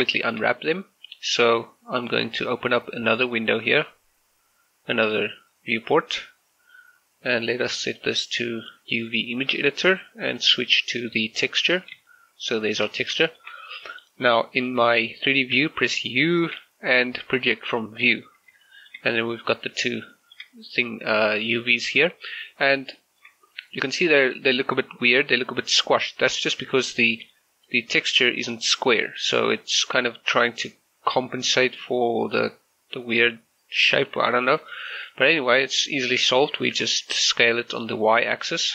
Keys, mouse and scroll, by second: 0.2 shift+middle click, 4.0-7.9 drag, 9.3 shift+middle click, 10.5 click, 11.9 scroll down 1, 12.1 shift+middle click, 15.6 u, 18.1 click, 18.7 shift+middle click, 20.2 shift+middle click, 22.3-22.8 scroll up 1, 22.8 scroll down 1, 23.1 shift+middle click, 26.3 scroll down 1, 26.7-29.6 middle drag, 34.2-34.8 scroll up 1, 34.9 shift+middle click, 35.2 scroll up 1, 36.5 s, 37.6 y.